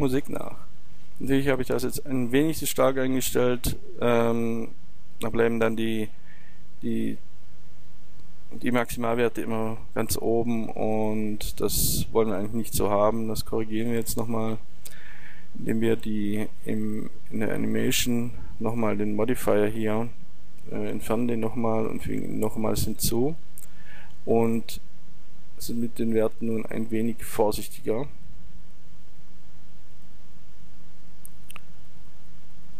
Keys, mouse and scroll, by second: 12.5-14.3 drag, 21.0-24.0 drag, 25.0-29.0 drag, 32.0-32.7 drag.